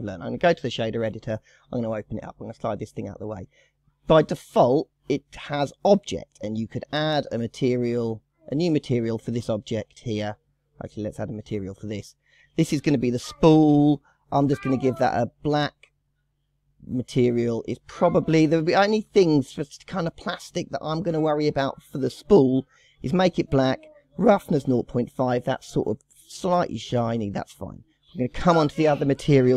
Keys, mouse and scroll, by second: 3.9-4.6 scroll down 4, 4.6 click, 7.3 click, 8.4-9.6 drag, 10.9-12.2 drag, 12.2-13.1 scroll up 14, 13.5 shift+middle click, 14.1-14.4 scroll up 4, 14.9 click, 15.4 click, 17.0 scroll up 2, 17.1-17.4 scroll down 3, 17.4-18.2 scroll up 6, 18.2 shift+middle click, 18.7-19.5 scroll down 3, 19.5-20.1 scroll down 2, 27.6-29.4 scroll down 1.